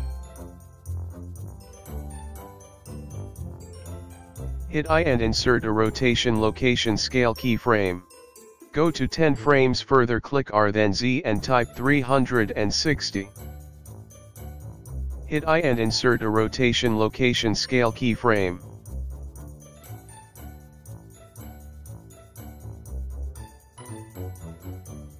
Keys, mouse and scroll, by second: 2.2 g, 6.9 i, 8.9 click, 12.3 click, 13.3 r, 22.5 i, 23.1 click, 23.4 space, 24.5 space, 24.7 click.